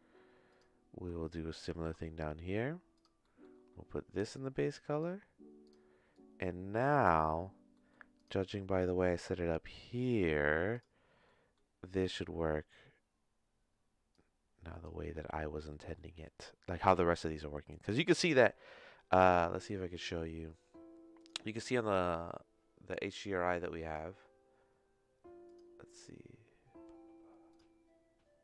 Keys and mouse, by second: 0.5 click, 1.2 shift+click, 1.7 shift+d, 3.2 middle click, 4.3 click, 5.6 click, 6.1-7.1 drag, 7.9 middle click, 11.4 middle click, 14.1 click, 15.2 middle click, 15.8 middle click, 21.5-23.9 drag, 25.5-27.6 drag.